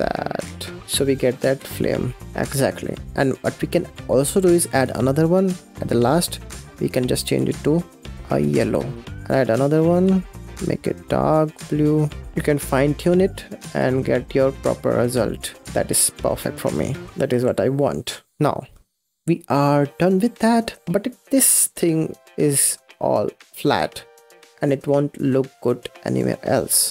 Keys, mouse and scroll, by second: 0.8-1.2 scroll down 5, 1.2 middle drag, 1.4 space, 2.1-2.7 scroll up 4, 2.7 space, 3.1 middle click, 3.9 scroll up 5, 4.6-5.7 drag, 5.9 click, 9.1 click, 12.3 click, 13.0-14.2 drag, 14.2 scroll down 5, 14.3 space, 14.3 middle click, 14.4 scroll up 4, 14.5 space, 14.7 click, 15.6 scroll down 3, 15.7 space, 17.0 scroll down 1, 17.1 click, 17.3 scroll up 5, 17.8 space, 18.0-18.5 scroll down 5, 18.7-20.0 scroll down 7, 20.0-20.6 scroll up 9, 20.6 click, 20.8-22.0 middle drag, 22.0-22.3 scroll down 5, 22.3 click, 22.5-23.7 middle drag, 23.7 space, 23.9-24.4 scroll down 6, 24.4-24.7 scroll up 6, 24.7 space, 25.0-25.5 scroll up 4, 25.5-26.0 middle drag, 26.0-26.9 scroll down 8.